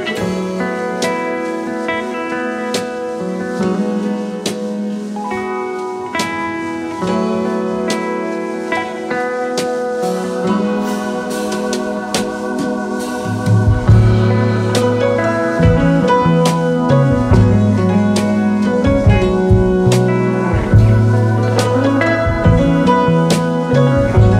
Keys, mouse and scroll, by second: 1.8 space, 4.0-11.1 drag, 4.7-6.6 typing, 8.3-10.0 right drag, 8.3 typing, 11.2-12.3 typing, 19.4-20.5 typing.